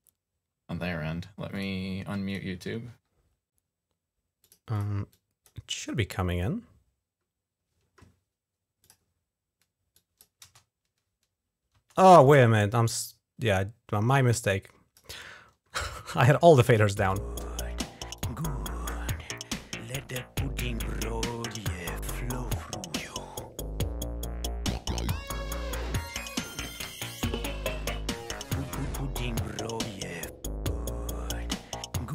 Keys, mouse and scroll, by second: 1.3 click, 2.0 click, 4.2 click, 4.6 click, 4.9 click, 8.6 click, 9.8 click, 10.2 space, 11.5 space, 12.1-14.8 drag, 16.5 click, 16.8 space, 18.0 click.